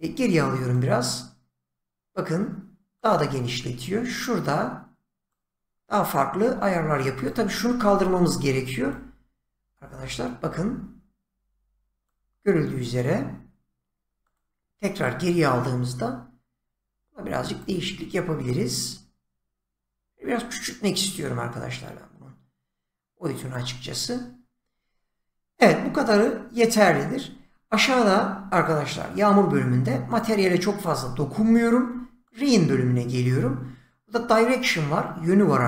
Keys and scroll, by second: 0.0 ctrl+z, 3.3 ctrl+z, 6.5 ctrl+z, 12.5 ctrl+z.